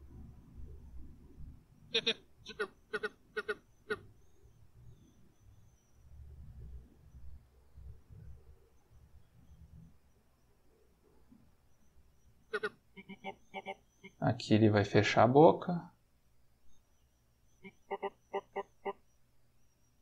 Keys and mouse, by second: 1.8-3.7 drag, 4.3-11.3 drag, 12.4-14.0 drag, 14.6-16.7 drag, 17.4-18.7 drag, 19.5-20.0 drag.